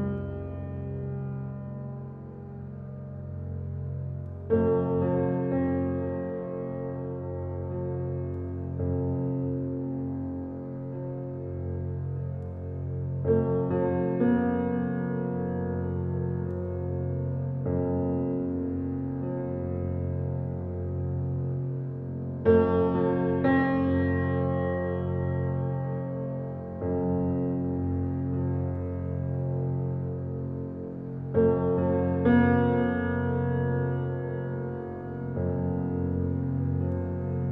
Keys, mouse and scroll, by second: 2.6 alt+click, 3.1 click, 4.8-6.2 alt+right drag, 6.2 alt+click, 7.0 click, 10.8 alt+click, 12.0 ctrl+alt+z, 12.8 alt+click, 28.8 alt+right click, 29.6 alt+click, 30.2 click, 34.7 alt+right click, 36.2 click.